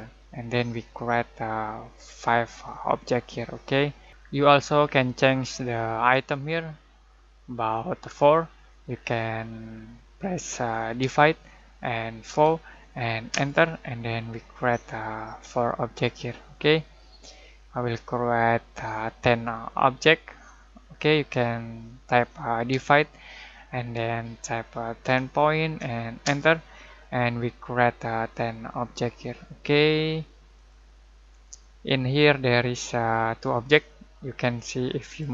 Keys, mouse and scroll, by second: 0.8-1.2 scroll down 1, 11.0 /, 13.3 Return, 13.3 typing, 24.8-25.5 typing, 26.2 Return, 30.8 click, 35.0 click, 35.2 click.